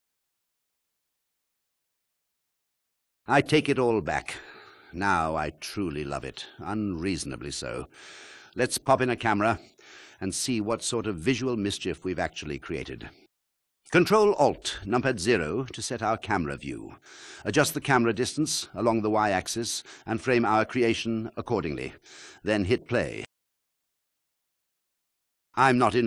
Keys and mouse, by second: 2.0 KP_1, 8.9 shift+a, 12.3 ctrl+alt+KP_0, 14.7 KP_1, 15.1 KP_0, 20.2 g, 20.4 y, 22.6 KP_1, 22.6 KP_0, 23.5 click, 24.1 click.